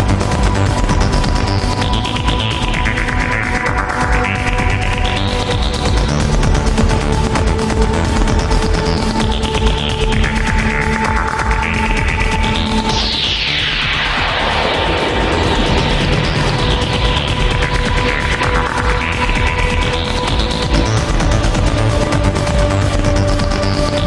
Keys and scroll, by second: 13.7 ctrl+z, 19.7 alt+space, 22.2 alt+space, 23.1 alt+space.